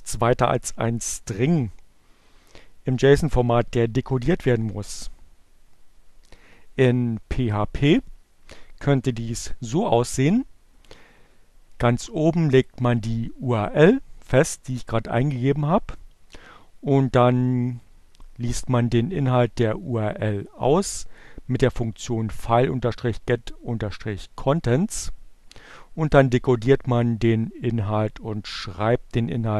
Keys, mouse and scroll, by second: 7.8 click, 12.0 click, 17.1-20.3 drag, 25.1 click.